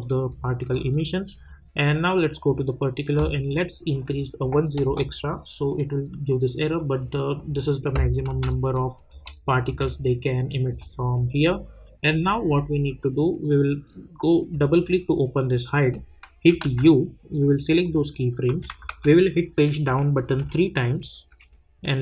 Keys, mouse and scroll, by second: 2.3 click, 4.8 Return, 6.7 click, 8.3 space, 12.1-14.1 drag, 14.1 -, 14.5 click, 16.6 u, 17.8 click, 18.5 =, 18.7 =, 18.9 =, 19.8 Page_Down.